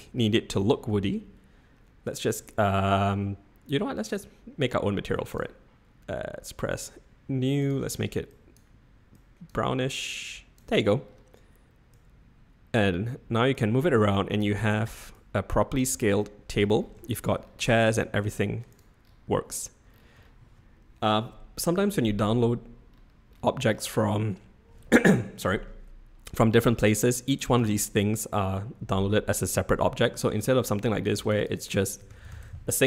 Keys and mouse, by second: 0.1-0.7 middle drag, 2.0-5.4 drag, 6.7 click, 7.6 drag, 11.9 click, 13.6 click, 15.2 click, 16.2-16.6 middle drag, 17.1 shift+middle click, 17.9 middle drag, 18.2 drag, 18.7 click, 27.6 Tab, 29.1 l, 30.1 Tab, 31.3-32.8 drag.